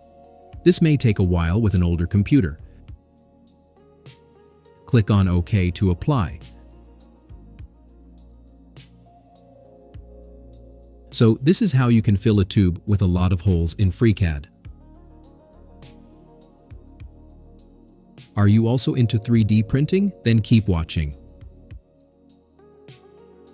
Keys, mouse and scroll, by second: 0.1 9, 5.4 click, 12.4-23.5 drag.